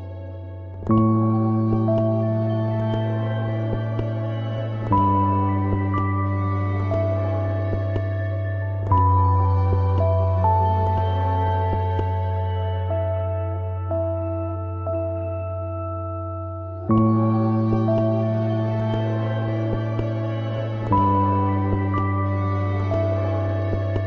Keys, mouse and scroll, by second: 1.4 ctrl+scroll down 1, 2.2-2.7 ctrl+scroll up 1, 3.2 ctrl+scroll up 1, 4.5-7.2 drag, 7.5 ctrl+scroll down 1, 8.0 ctrl+scroll up 1, 9.3-9.7 ctrl+scroll up 2, 9.7 e, 10.5 click, 11.6 ctrl+scroll up 1, 14.6 click, 21.9 click.